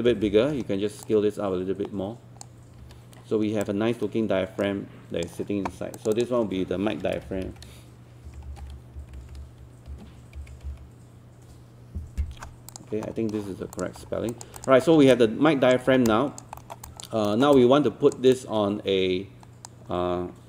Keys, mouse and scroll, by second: 0.1 alt+e, 1.0 click, 2.8 w, 3.6-5.9 drag, 6.9-11.2 typing, 12.7 click, 14.0 scroll down 1, 14.3 alt+click, 14.9 scroll up 1, 15.1 alt+click, 16.1 alt+click, 16.6 alt+middle click, 17.2 alt+middle click, 17.6 alt+click, 18.4 alt+click.